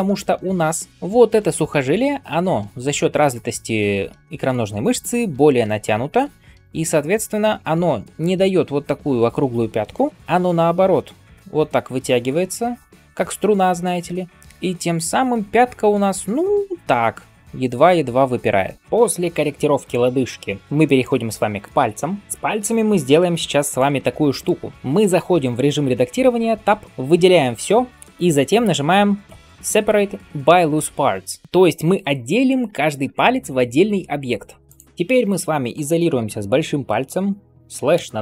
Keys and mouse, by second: 10.1 ctrl+z, 22.2-23.6 drag, 23.8-24.7 drag, 24.7-38.2 middle drag, 26.5 Tab, 27.9 a, 29.2 p, 37.8 KP_Divide.